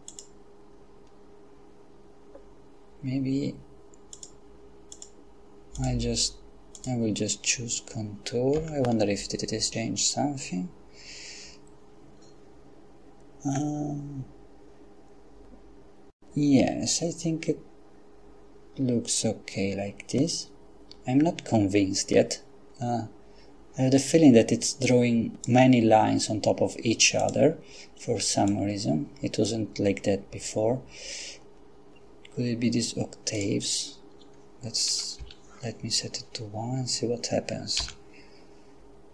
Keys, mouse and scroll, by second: 0.1 click, 4.1 click, 4.9 click, 5.8 click, 6.8 click, 8.6 F12, 13.6-14.1 scroll down 2, 24.8 click, 27.2 click, 28.5 click, 33.4 click, 34.9 1, 35.2 Return, 37.8 F12.